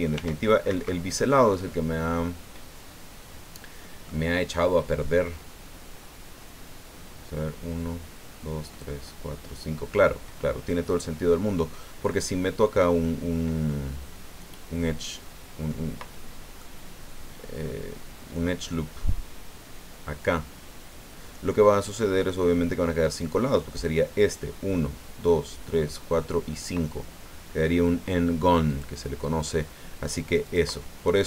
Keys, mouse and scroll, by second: 0.1 ctrl+r, 0.7 ctrl+Escape, 1.5-4.2 drag, 10.4-11.0 scroll down 2, 13.0-15.9 drag, 16.6-18.9 drag, 28.7 click, 30.4 click.